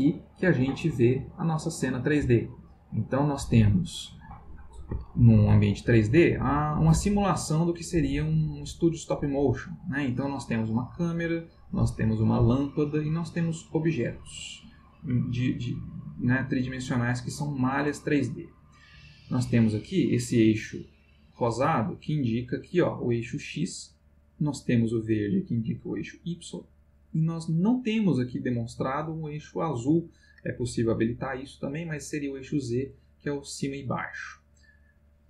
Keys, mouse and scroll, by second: 0.7-1.7 middle drag, 2.4-4.3 middle drag, 4.8-5.5 ctrl+middle drag, 6.3 ctrl+shift+middle click, 6.5-7.0 ctrl+shift+middle drag, 7.2-10.4 shift+middle drag, 11.0 click, 12.5 click, 13.8 click, 15.2-18.7 middle drag, 27.6-28.2 middle drag, 31.5 middle click, 34.1-35.2 middle drag.